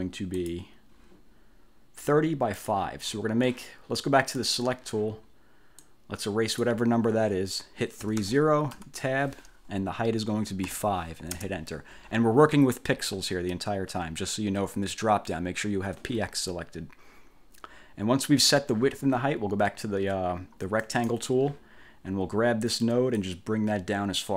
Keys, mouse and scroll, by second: 0.5 click, 2.7 click, 4.5 click, 5.9-6.9 drag, 7.9-8.8 typing, 8.9 Tab, 10.7 5, 11.5 Return, 21.0 click, 23.3-24.3 drag.